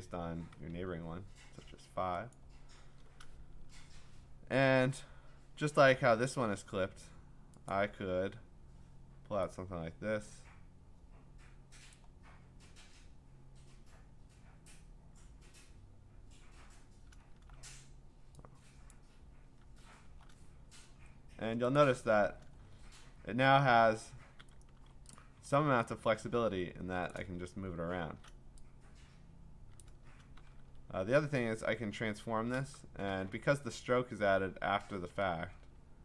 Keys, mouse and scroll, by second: 0.6-3.7 Tab, 2.3 click, 5.2-6.8 scroll, 7.7 click, 11.9 click, 17.1 click, 18.9 click, 19.9 scroll, 21.8 click, 22.6-23.7 scroll, 25.2 click, 25.2 v, 27.1 click, 27.1 v, 27.4-28.5 scroll, 29.8 click, 30.5 ctrl+t, 30.8-31.3 scroll up 10.